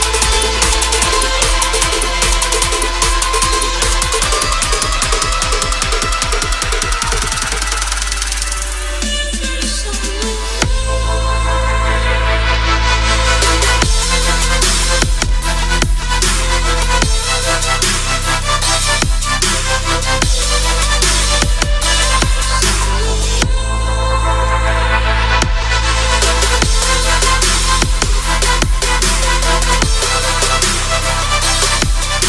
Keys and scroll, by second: 0.6 space, 0.8 [, 1.8 space, 2.2 ], 3.4 space, 8.6 space, 9.9 space, 14.0 space, 17.1 space, 22.0 space, 24.4 space, 26.9 space, 28.7 [, 30.6 space, 31.1 ].